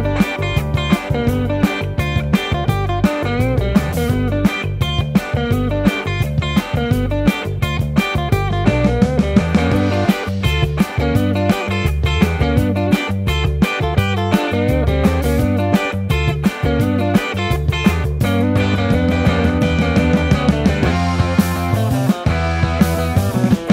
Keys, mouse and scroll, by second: 0.3 Tab, 5.6 Tab, 7.2 Tab, 8.4 Tab, 11.4 Tab, 11.8 Tab, 13.1 g, 14.4 ctrl+z, 19.1 Tab, 21.3 Tab, 21.4 Tab, 23.3 Tab, 23.6 Tab.